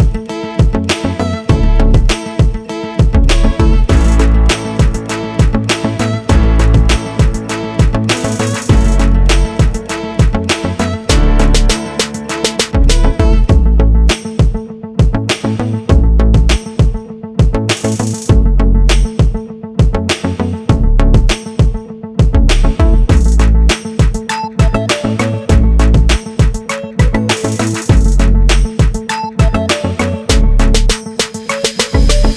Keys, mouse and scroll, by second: 0.4 click, 2.5 r, 5.5 ctrl+z, 6.4 r, 11.7 i, 13.8 i, 14.6 right click, 14.9 right click, 15.1 right click, 15.4 click, 17.5 right click, 17.9 click, 18.5 click, 23.4 click, 25.6 click, 27.9 right click, 29.0 KP_Decimal, 29.3-29.8 scroll down 6, 30.7 click, 31.9 i.